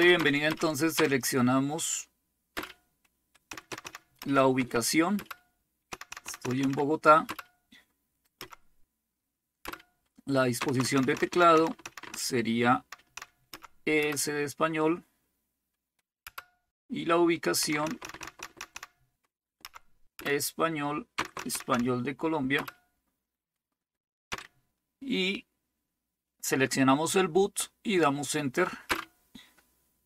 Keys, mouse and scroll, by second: 0.0 Up, 0.1 Up, 0.4 Up, 0.9 Down, 2.5 Return, 3.4 Down, 3.6 Down, 3.8 Down, 4.2 Up, 5.1 Return, 5.9 Down, 6.1 Down, 6.2 Down, 6.4 Down, 6.8-7.2 typing, 8.3 typing, 9.6-12.0 typing, 12.1-12.9 Down, 13.2 Down, 13.5 Up, 14.0 Return, 16.4 Return, 17.6 Down, 17.8 Down, 18.0 Down, 18.2 Down, 18.5 Down, 18.7 Down, 19.6 Up, 20.1 Return, 21.1 Down, 21.4 Down, 21.5 Down, 21.7 Down, 22.5 Return, 24.3 Down, 28.9 Return.